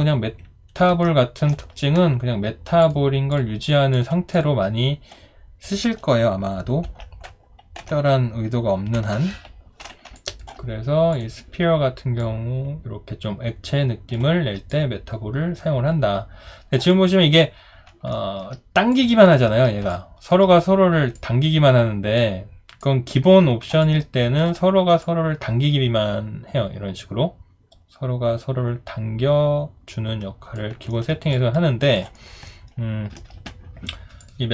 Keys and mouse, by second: 0.9 ctrl+z, 10.1 alt+click, 16.9 alt+click, 18.1 alt+middle click, 19.9 alt+click, 23.8 alt+click, 30.9 alt+middle click, 31.3 alt+click, 32.1 alt+right click, 32.5 alt+middle click.